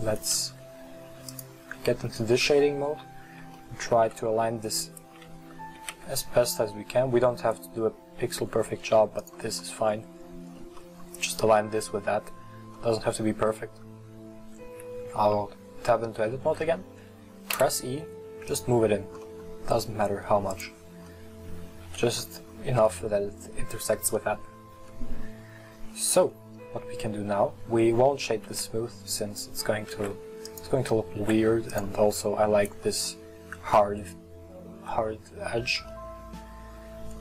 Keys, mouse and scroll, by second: 1.4 click, 2.8 scroll up 4, 3.6-4.2 shift+middle drag, 4.2-4.9 scroll up 2, 4.9 shift+middle click, 5.8 g, 9.7 middle click, 9.9-10.8 scroll down 6, 10.8-12.2 middle drag, 12.2-12.8 scroll down 2, 12.8 middle click, 13.5 Tab, 17.6 e, 19.3-20.6 middle drag, 20.6 click, 21.1 middle click, 21.8 Tab, 22.3-25.6 middle drag, 25.6 scroll up 2, 26.2-27.0 middle drag, 27.0 scroll up 1, 27.5-28.6 scroll down 1, 28.6 w, 30.0 w, 31.3 w, 32.5 scroll up 1, 33.1-36.8 middle drag, 36.8-37.2 scroll down 2.